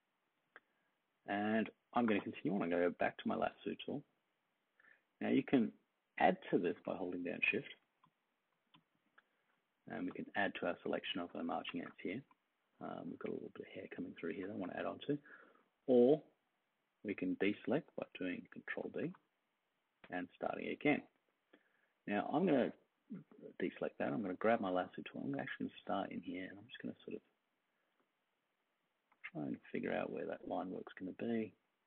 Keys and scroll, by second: 2.0 l, 8.1 super+=, 8.7-10.0 space, 19.0 super+d.